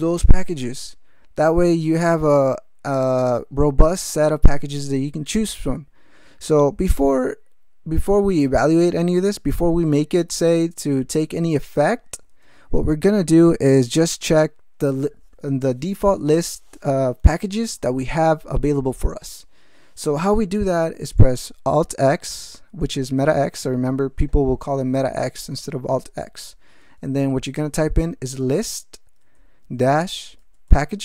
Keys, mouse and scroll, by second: 23.0 alt+x, 28.1-30.9 typing.